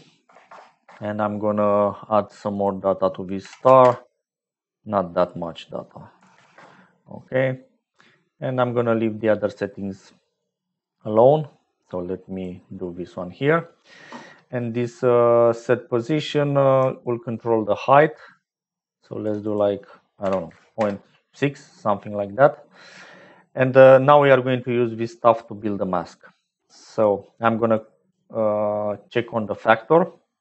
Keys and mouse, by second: 2.4-4.9 drag, 5.1-7.1 drag, 9.6 middle click, 10.3 click, 11.8 click, 17.0-19.2 shift+drag, 19.3-21.7 drag, 22.0 middle click, 24.1 click, 25.5 click, 26.6 click, 27.7 click, 29.9-30.4 drag.